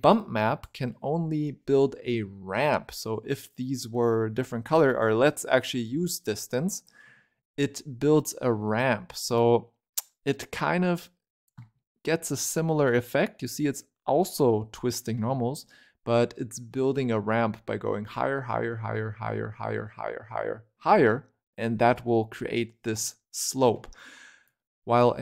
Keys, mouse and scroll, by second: 0.0 click, 4.4 scroll down 1, 4.6-6.0 middle drag, 6.0 click, 7.9-9.3 scroll up 2, 9.6 shift+click, 10.7 shift+click, 11.8-12.9 middle drag, 13.1-14.6 middle drag, 15.1-18.1 middle drag, 22.0-24.3 middle drag, 24.3 click.